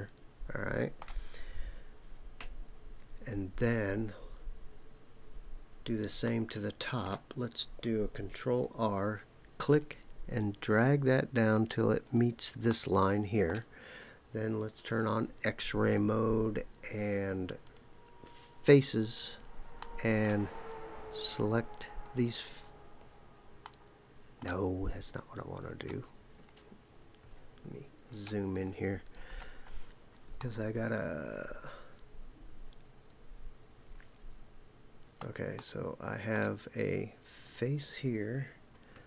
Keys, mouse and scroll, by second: 1.4-1.8 scroll down 3, 6.2 shift+middle click, 8.6 ctrl+r, 12.0 click, 12.7 middle click, 14.8 click, 17.6 click, 19.8 middle click, 20.7-22.1 drag, 23.6 middle click, 27.2 KP_Decimal, 28.0-30.4 scroll up 7, 30.4-35.2 middle drag, 35.5 middle click, 37.4 click.